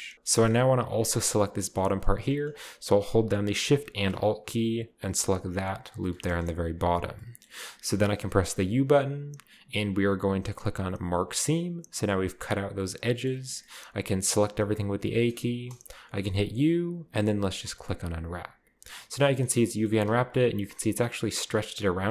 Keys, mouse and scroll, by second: 0.3-0.8 scroll up 2, 0.8-1.1 scroll up 1, 1.1-1.6 scroll down 2, 5.6 alt+shift+right click, 7.0-8.6 scroll down 2, 8.6 u, 11.0-12.8 drag, 14.3 a, 14.7 a, 16.2 u, 17.9-19.2 drag, 18.6-19.2 scroll down 1, 19.2-19.7 scroll down 1, 19.4-20.8 middle drag, 19.9-20.8 scroll up 1.